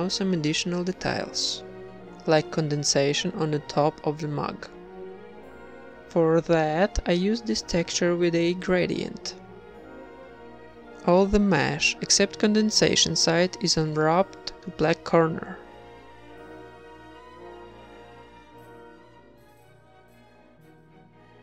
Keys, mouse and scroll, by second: 2.1 s, 2.1 g, 3.3 g, 3.3 z, 3.8 ctrl+Tab, 3.8 z, 3.9 ctrl+r, 5.5 ctrl+z, 6.1 a, 6.5 right click, 6.5 z, 6.7 g, 9.3 Tab, 9.7 Tab, 9.8-12.3 typing, 11.5 ctrl+r, 13.7 a, 14.0 g, 14.9 Tab, 15.3 ctrl+s, 15.7 Tab, 16.2 ctrl+Tab, 16.6 a, 16.8 click, 19.0 ctrl+Tab, 19.0 KP_1, 19.7 u.